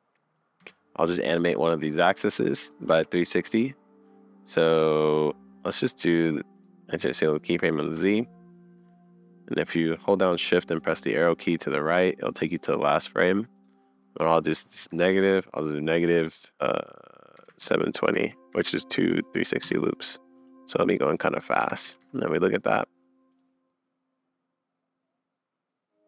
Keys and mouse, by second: 0.6 n, 1.8 click, 2.9 super+z, 5.6-6.6 drag, 7.8 shift+Right, 13.5-15.4 drag, 18.2 BackSpace, 21.5 shift+Left, 22.0 space.